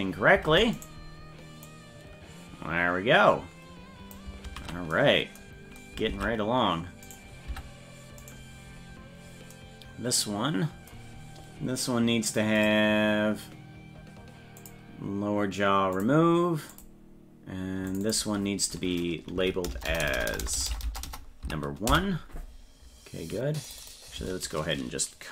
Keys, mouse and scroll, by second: 0.5 ctrl+Tab, 0.8 right click, 1.6-4.2 drag, 4.5 ctrl+z, 6.1 ctrl+Tab, 7.1 right click, 7.5 Tab, 8.2 right click, 12.6 click, 14.6 click, 16.0 click, 16.7 click, 17.9 click, 18.1-22.4 drag, 19.9-20.9 typing, 23.7 click, 23.8-25.3 drag.